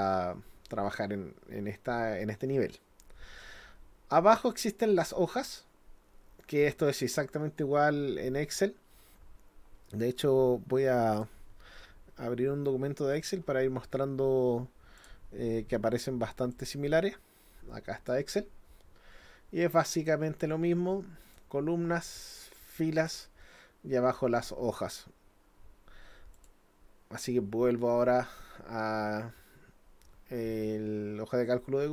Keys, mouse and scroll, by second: 11.2 click, 15.0 click, 16.5-18.1 drag, 21.2 click, 23.0 click, 26.4 click.